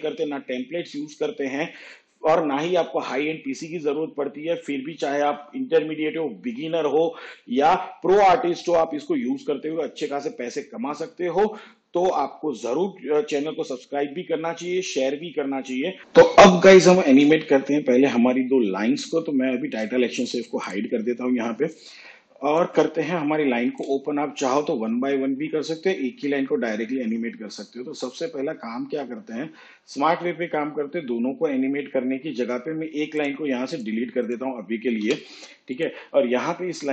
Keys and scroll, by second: 34.9 Delete.